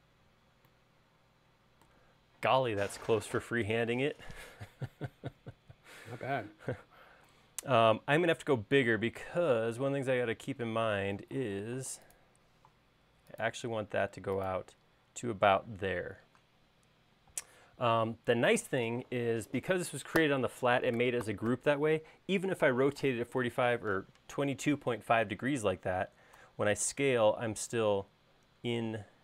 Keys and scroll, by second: 8.3 space, 10.2 q, 17.5 space, 26.4 s.